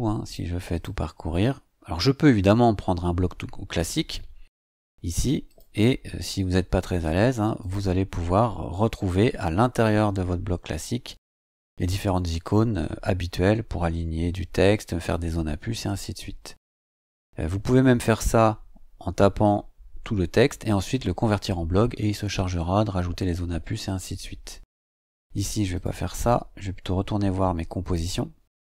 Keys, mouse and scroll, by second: 0.3 click, 0.7 click, 5.4 click, 7.6 click, 25.7 click, 27.8 click.